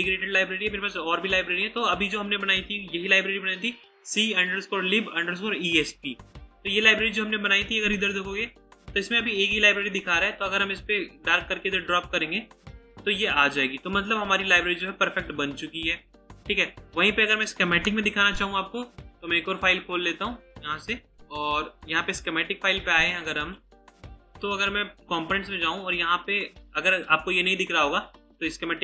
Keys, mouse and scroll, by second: 7.8-8.4 scroll up 1, 8.6-11.2 scroll down 1, 11.2-12.0 scroll up 1, 13.6 right click, 17.9 Delete, 22.0 double click, 22.9 right click.